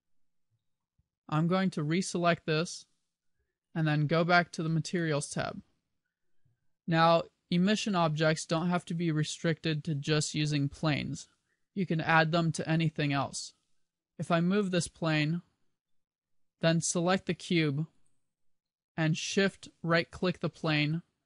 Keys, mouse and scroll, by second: 2.4 click, 4.7 click, 5.2 click, 8.7 middle click, 14.3 click, 17.5 right click, 20.7 shift+right click.